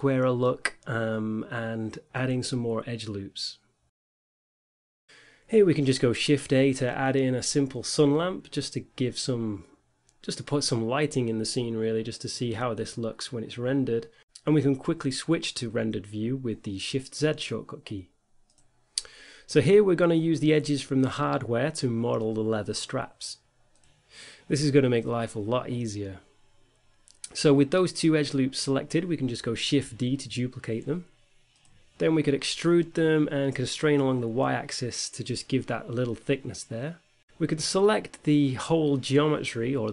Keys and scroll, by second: 0.1 ctrl+r, 2.8 Tab, 7.5 5, 9.5 shift+a, 10.4 g, 10.7 r, 11.3 shift+z, 17.3 z, 18.3 x, 22.2 Tab, 29.5 shift+d, 30.9 x, 31.5 y, 32.6 e, 32.9 x, 33.5 y.